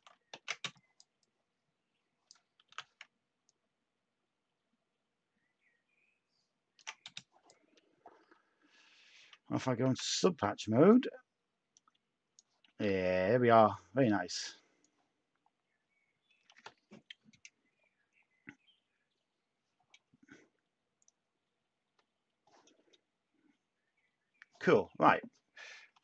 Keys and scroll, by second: 0.3 ctrl+z, 0.6 space, 2.6 t, 7.0 t, 8.2 Tab, 9.8 a, 12.7 a, 25.9 /.